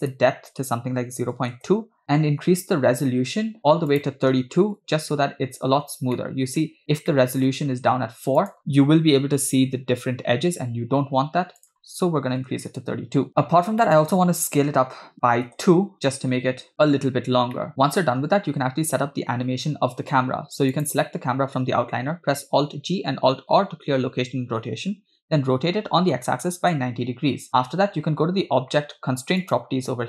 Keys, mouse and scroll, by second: 0.2-1.9 drag, 4.0-5.2 drag, 6.1-6.6 middle drag, 6.6-7.2 scroll up 3, 7.2 middle click, 8.5 click, 11.7-13.2 drag, 13.4-13.8 scroll down 3, 13.8 middle click, 14.6 s, 17.6 middle click, 17.7 scroll up 3, 18.1-18.5 scroll down 2, 20.9 click, 22.9 alt+g, 23.8 alt+r, 25.3 r, 29.6 click.